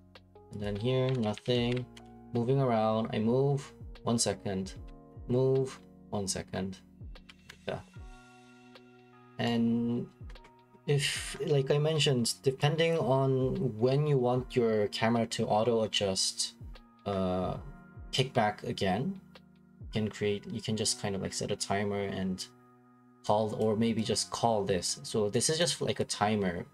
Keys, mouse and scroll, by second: 0.8-3.0 typing, 4.5-5.4 typing, 7.5 Escape, 8.7 click, 8.9 middle click, 9.0 middle click, 9.5 right click, 10.1 right click, 10.1 right click, 12.9 click, 14.9 click, 18.2 right click, 23.6 click, 24.9 click, 25.6 click.